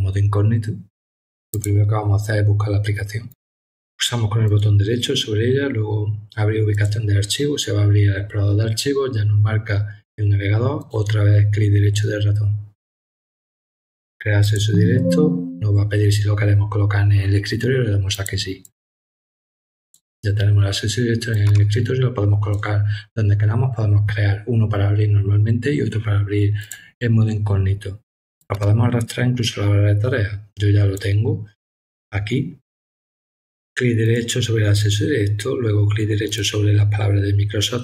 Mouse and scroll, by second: 1.5 click, 4.4 right click, 6.7 click, 9.2 middle click, 10.8 right click, 14.4 click, 18.1 click, 18.6 click, 19.8 click, 21.3-22.5 drag, 26.6 click, 28.4-30.9 drag, 34.0 right click, 36.2 right click.